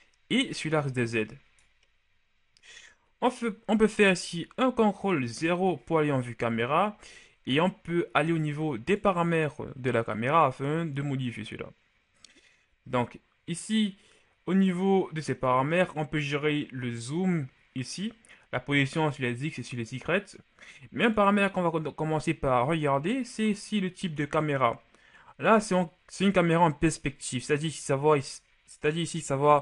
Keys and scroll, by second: 5.1 ctrl+KP_0.